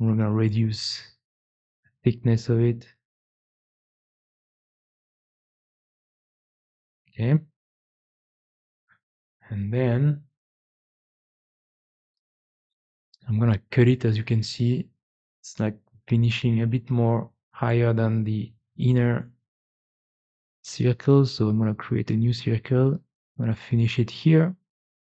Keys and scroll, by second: 8.0 4.